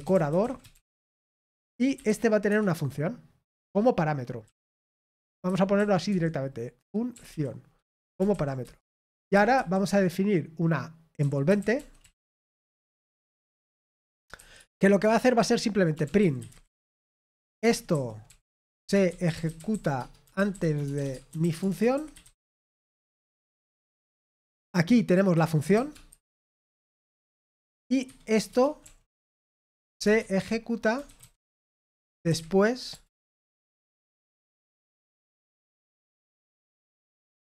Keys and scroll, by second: 0.0-2.5 typing, 5.8-6.5 typing, 8.9-10.0 typing, 12.5-15.2 typing, 16.9-24.2 typing, 25.3 f, 26.6 Return, 26.6-33.1 typing.